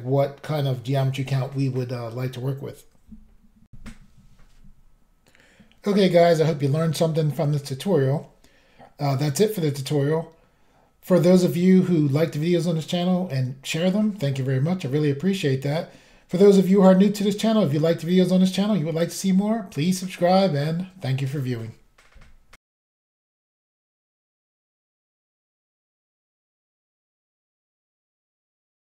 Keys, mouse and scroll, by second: 3.7 Pause, 4.0 Insert.